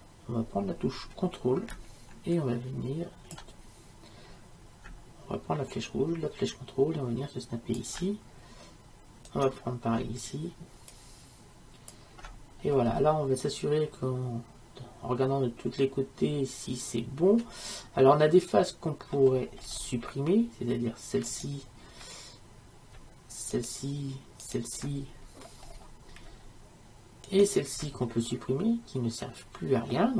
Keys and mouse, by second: 9.3-11.2 right drag, 11.2-12.7 drag, 12.7-15.0 middle drag, 15.7 middle click, 19.6-21.3 middle drag, 21.3-23.2 right drag, 23.6-29.3 right drag, 28.1-30.1 middle drag.